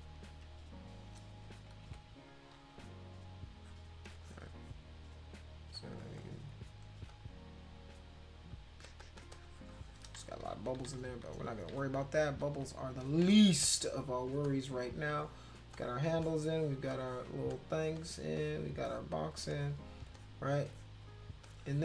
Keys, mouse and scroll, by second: 1.8 ], 2.4 click, 3.6 click, 4.1 space, 4.2 click, 5.8 click, 6.2 click, 7.1 click, 8.0 click, 8.5 click, 8.9 click, 9.0 click, 9.3 click, 9.4 click, 9.7 click, 10.2 ctrl+z, 10.5 ctrl+z, 10.6 ctrl+z, 10.8 ctrl+z, 11.0 ctrl+z, 11.3 ctrl+z, 11.6 ctrl+z, 11.8 ctrl+z, 12.2 ctrl+z, 12.6 ctrl+z, 13.4 space, 13.6 click, 14.4 click, 15.2 click, 15.7 click, 16.2 click, 16.9 click, 17.5 click, 18.0 click, 18.4 click, 18.8 click, 19.5 click, 20.2 click, 20.7 click, 21.4 click.